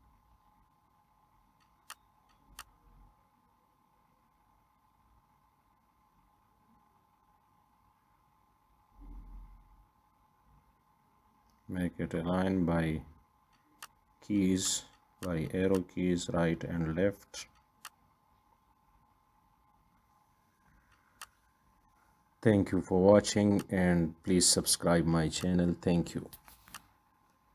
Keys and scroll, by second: 9.1 Left, 10.9 Right, 13.0 ctrl+d.